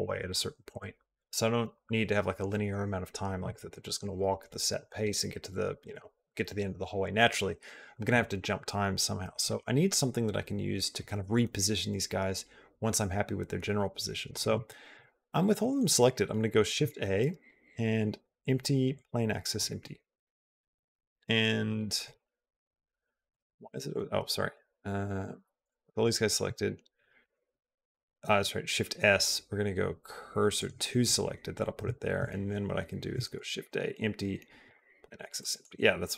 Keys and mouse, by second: 14.4 shift+middle click, 15.4-16.5 shift+middle drag, 16.5 shift+a, 19.9 shift+middle click, 22.0-23.1 shift+middle drag, 24.1 shift+middle click, 25.4 click, 27.0 shift+s, 33.1 shift+a, 35.2 middle click.